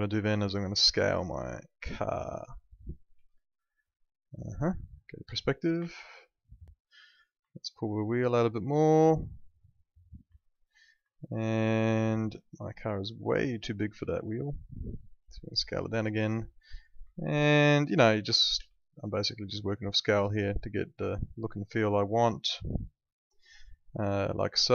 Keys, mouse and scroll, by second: 0.1 r, 0.7 click, 3.1 w, 4.0 middle click, 5.2 p, 5.9 alt+middle click, 7.2 click, 7.5 alt+middle click, 8.7 click, 10.4 alt+middle click, 11.1 alt+middle click, 12.7 click, 14.2 r, 17.2 alt+middle click, 18.6 w, 19.7 click, 21.1 alt+middle click, 24.0 middle click, 24.6 alt+middle click.